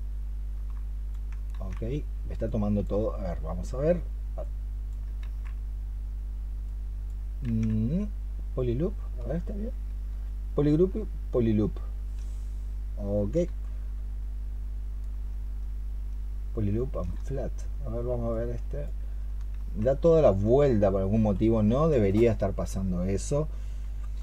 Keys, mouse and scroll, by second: 1.4 ctrl+z, 5.1 ctrl+z, 9.2-16.9 space, 19.4 space.